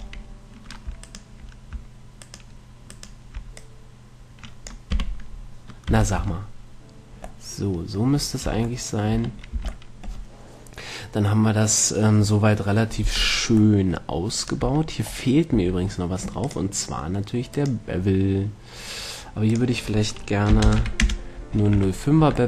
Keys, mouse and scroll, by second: 1.3-5.2 right drag, 3.9-5.7 drag, 5.2 z, 6.1 z, 6.5 Tab, 8.7 Tab, 9.5 Tab, 9.9 a, 14.7-16.7 middle drag, 14.9 Tab, 15.8 Tab, 16.7-18.5 drag, 19.8-21.7 drag, 22.0 a.